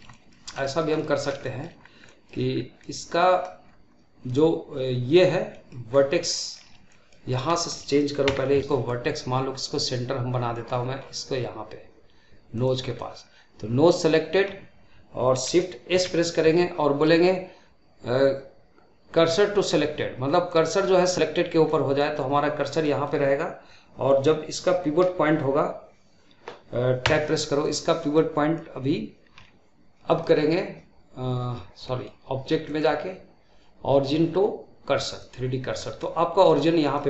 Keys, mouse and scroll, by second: 0.3 scroll down 2, 0.5-1.7 shift+middle drag, 1.7 scroll down 2, 1.9 middle click, 2.4 scroll up 1, 2.7-3.5 middle drag, 3.5-4.3 scroll up 2, 4.3-5.4 scroll up 1, 5.4-5.8 middle drag, 5.8-6.2 scroll up 1, 6.2-7.1 shift+middle drag, 7.1 scroll up 2, 7.4-8.1 shift+middle drag, 8.1 Tab, 8.5-10.9 middle drag, 10.9-12.4 scroll up 3, 12.4 click, 12.8-15.8 middle drag, 15.8 shift+s, 21.5 middle click, 22.4-22.8 scroll down 1, 22.8-25.8 middle drag, 26.9 Tab, 27.5 click, 28.0-29.9 middle drag, 29.9-31.7 drag, 31.7-32.5 middle drag, 32.5-35.6 drag, 35.7 scroll down 1, 35.9-37.0 middle drag.